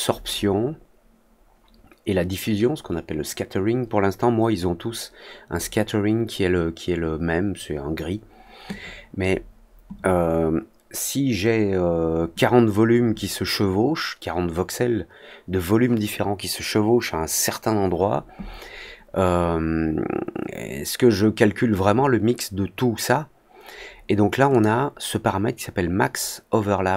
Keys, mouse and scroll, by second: 24.4 click.